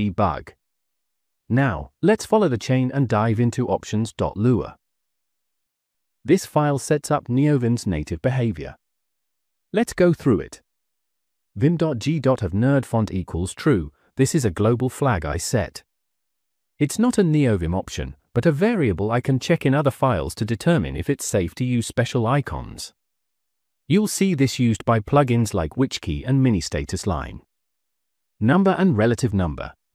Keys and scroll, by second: 6.9 -, 8.0 k, 9.1 Return, 12.1 Return, 12.9 j, 13.1 j, 14.0 Return, 16.2 j, 25.4 j, 26.0 j, 26.2 j, 27.0 k, 28.1-29.9 typing.